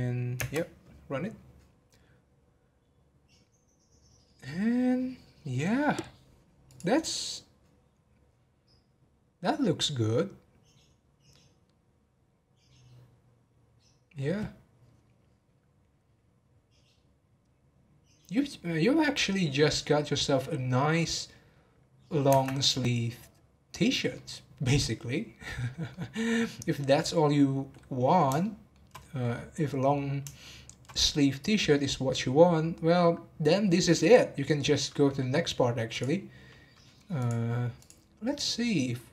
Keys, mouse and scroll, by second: 0.4 space, 22.4 space, 24.1-24.7 middle drag, 24.7 scroll up 2, 25.1-25.5 middle drag, 25.5-25.9 scroll down 1, 25.9-34.0 middle drag, 35.3-35.9 middle drag, 35.9 click, 36.7-37.1 middle drag, 37.1 click, 37.7 click.